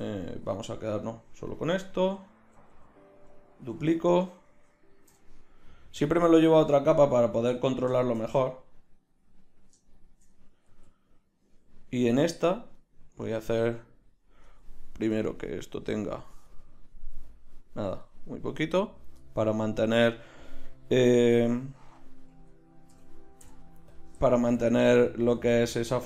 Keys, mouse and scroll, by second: 0.9-2.1 drag, 2.1 z, 2.4 a, 2.7 a, 4.0 shift+d, 5.1 m, 10.7 z, 12.3 z, 12.8-15.7 right drag, 21.0-23.4 right drag, 21.4 Tab, 22.8 ctrl+i, 23.4 x, 24.4 z.